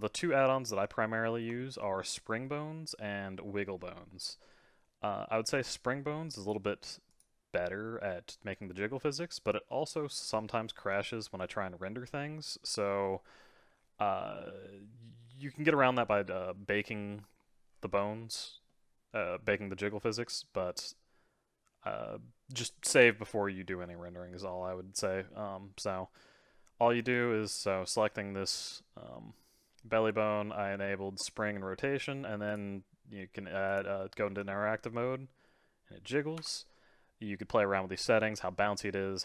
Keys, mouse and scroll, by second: 0.8-1.2 scroll down 1, 1.2-1.6 scroll up 2, 1.6-3.0 shift+middle drag, 3.0-4.3 scroll down 4, 4.3-6.4 middle drag, 6.4 click, 7.1 click, 8.9-12.1 middle drag, 18.7-23.0 middle drag, 32.5-33.8 drag, 34.3 g.